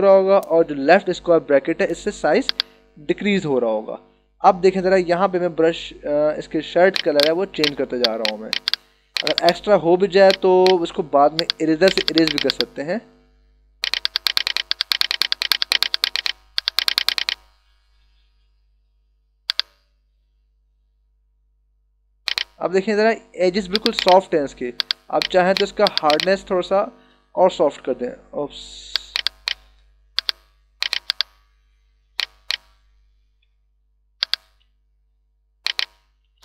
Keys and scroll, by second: 0.6 [, 28.4 d, 29.4 space, 33.6 [, 36.3 [.